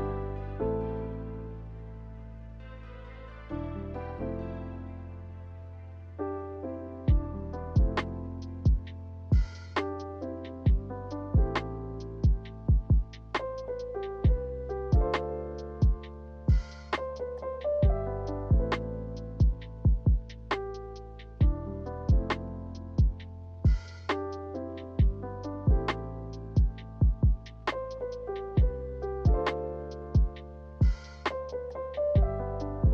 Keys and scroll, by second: 8.0 Escape, 13.8 Escape, 21.8 z.